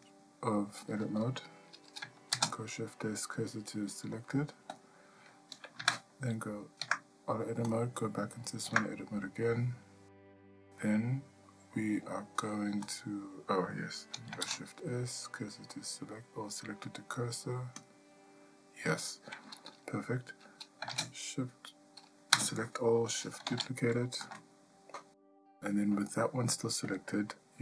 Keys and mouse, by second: 0.0 click, 2.3 shift+s, 5.8 Tab, 6.8 Tab, 12.9 click, 14.4 shift+s, 20.9 shift+d, 22.3 a, 23.5 shift+d, 27.0-27.6 drag.